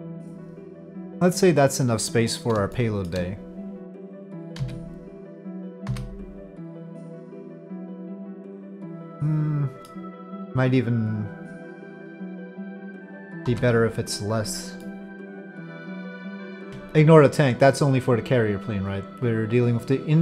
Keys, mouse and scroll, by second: 2.8 shift+middle click, 4.6 z, 7.7-9.9 middle drag, 10.9-12.8 drag, 13.5 ctrl+z, 14.9 drag, 15.1-15.8 middle drag, 16.6 Tab, 19.5-20.2 drag.